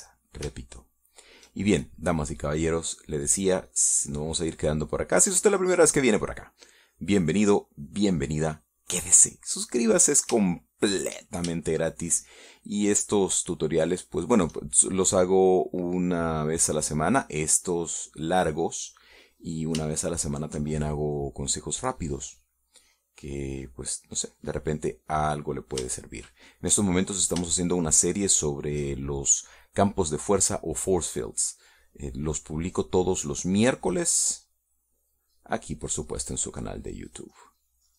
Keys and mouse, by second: 2.1 shift+middle click, 3.6-7.8 drag, 8.4-10.3 drag, 12.0 shift+middle click, 12.6 shift+middle click, 13.0 shift+click, 18.6-21.0 drag, 21.5 shift+middle click, 24.8 click, 27.4-28.8 shift+middle drag, 29.0 shift+middle click, 33.0-34.4 drag, 34.6 middle click, 35.6 click, 36.5 click, 37.5 click.